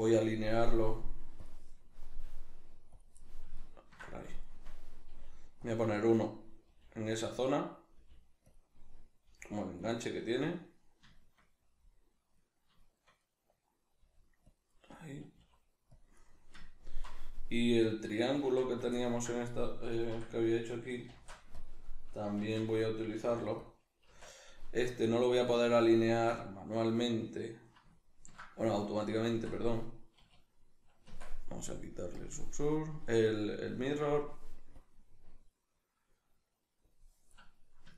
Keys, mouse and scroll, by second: 0.1 click, 2.1 click, 2.1 g, 3.2-5.7 middle drag, 5.1 g, 5.7 click, 5.9-7.4 shift+middle drag, 6.7 g, 7.4 click, 7.5-8.6 middle drag, 8.0 g, 8.6 click, 9.3 g, 9.9 click, 10.1-16.1 middle drag, 14.1 g, 14.6 click, 15.3 s, 16.1 click, 16.2-17.9 middle drag, 17.9 right click, 18.4 Tab, 18.9 ctrl+middle click, 19.6 right click, 20.1 l, 21.1 shift+d, 21.7 click, 22.4 shift+Tab, 23.3 p, 24.1 Tab, 24.5 right click, 24.9-32.1 ctrl+middle drag, 29.2 Tab, 30.2 a, 31.0 Tab, 32.1-37.4 drag, 37.4-37.9 middle drag.